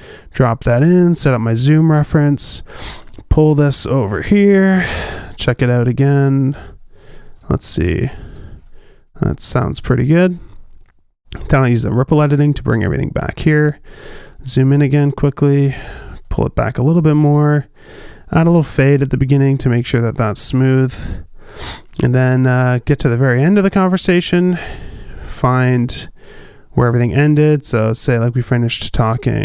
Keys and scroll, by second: 2.7 q, 6.4 q, 9.4 space, 15.7 q.